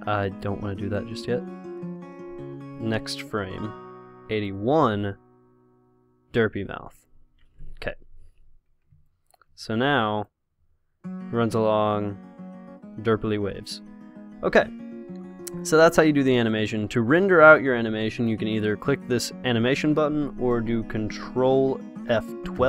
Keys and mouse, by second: 0.5-4.7 drag, 2.5 i, 6.9 i, 7.5 i, 9.4-12.4 drag, 15.6-17.4 middle drag.